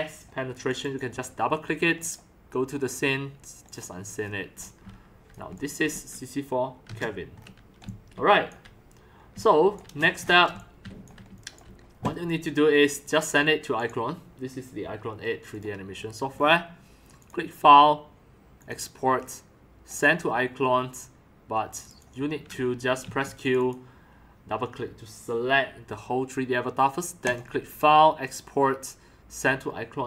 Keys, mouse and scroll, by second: 4.2 middle click, 4.3-5.5 typing, 4.7 click, 5.2 click, 5.4 click, 5.6-6.0 drag, 7.4 scroll up 3, 7.8-8.2 drag, 7.8 x, 8.1 c, 9.3-11.8 typing, 9.6 click, 10.6 drag, 10.8 click, 11.2 right drag, 11.4 click, 11.8 scroll down 1, 13.0 drag, 13.8 click, 15.5 click, 17.2 click, 18.6 click, 19.9 click, 21.7 click, 21.9 click, 23.0 q, 23.4 click, 27.2 click, 28.2 click, 29.3 click.